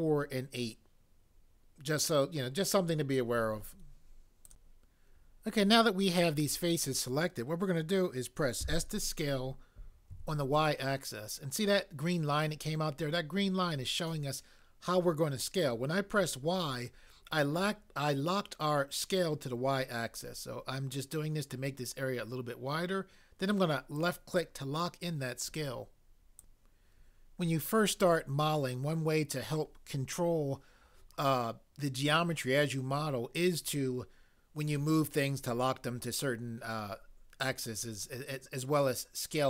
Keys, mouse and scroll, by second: 8.6 s, 10.1 y, 24.0 click, 26.3 click.